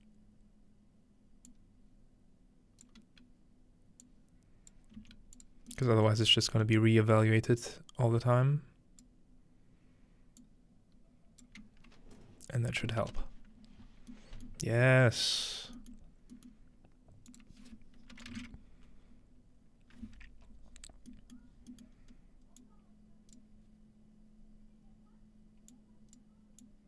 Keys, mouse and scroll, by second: 1.5-5.9 drag, 5.0-5.9 typing, 6.3 click, 7.7-9.1 drag, 10.4-11.5 drag, 12.9-14.1 ctrl+middle drag, 13.8 scroll down 1, 14.5-15.4 scroll down 1, 15.4-18.1 scroll up 1, 16.9-18.1 middle drag, 17.3-19.1 drag, 18.1-18.9 typing, 21.1-23.4 middle drag, 21.9-22.6 scroll up 2, 22.6 click, 25.7 click, 26.6 click.